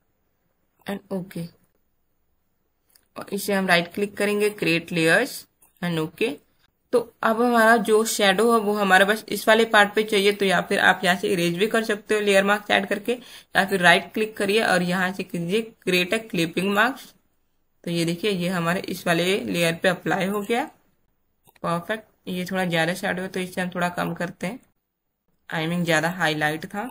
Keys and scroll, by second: 6.6 ctrl+z, 21.0 space.